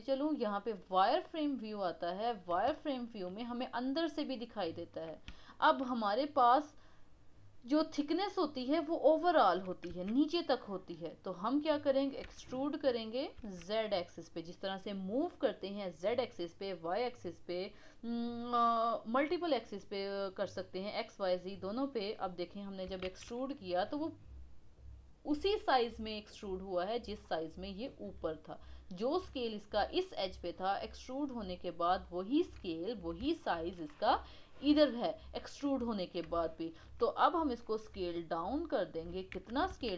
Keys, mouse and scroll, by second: 1.5 click, 2.9-8.5 shift+middle drag, 9.9 KP_1, 12.2 e, 20.6-23.0 middle drag, 23.0 shift+z, 23.3-26.4 middle drag, 27.2-29.0 middle drag, 29.0 click, 29.2 click, 31.2 click, 31.4 click, 32.0-36.1 middle drag, 36.1-36.6 scroll up 1, 36.6-37.6 shift+middle drag, 37.6 s, 39.3 KP_1, 39.9 shift+z.